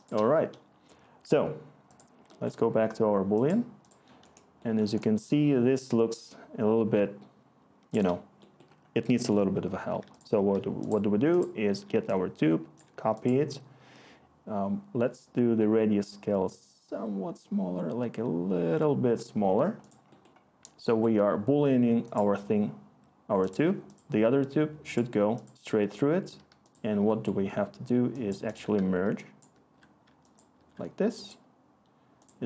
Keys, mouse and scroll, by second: 7.0-8.0 click, 7.0 click.